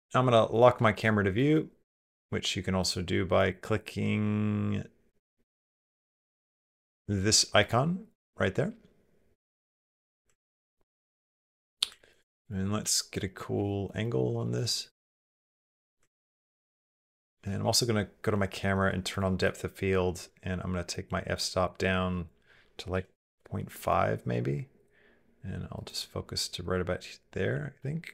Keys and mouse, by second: 0.6 shift+middle click, 0.9 middle click, 1.3 ctrl+middle click, 1.6 shift+middle click, 2.6 click, 3.3 click, 3.5 click, 5.9 n, 7.4 click, 9.3 shift+middle click, 9.7 middle click, 10.1 ctrl+middle click, 10.6 middle click, 11.0 shift+middle click, 11.2 click, 11.8 ctrl+middle click, 12.0 shift+middle click, 12.1 shift+click, 12.3 click, 12.7 shift+click, 13.1 click, 13.5 shift+middle click, 14.2 shift+middle click, 17.4 shift+b, 19.3 click, 27.6 middle click.